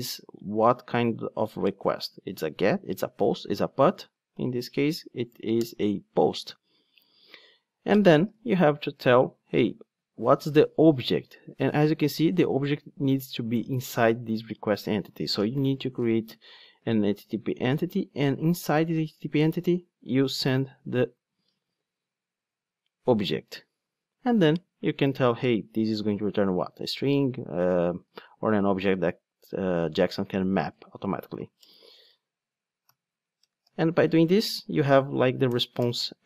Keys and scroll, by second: 5.6 Return, 7.0 Return, 7.1 super+1, 9.5 super+p, 17.4 Return, 22.9 Return, 30.7 Return, 35.4 Return.